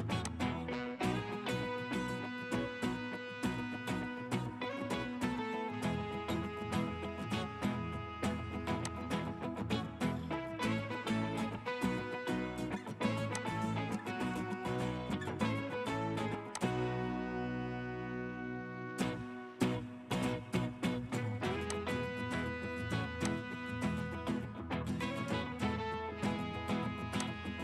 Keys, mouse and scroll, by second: 1.4 scroll down 1, 2.8 scroll up 1, 3.2 scroll down 1, 3.8 middle click, 5.6-6.2 scroll down 1, 7.0 middle click, 9.7 scroll up 1, 17.8 middle click, 19.0 scroll down 1, 24.2 scroll up 1, 26.1 middle click.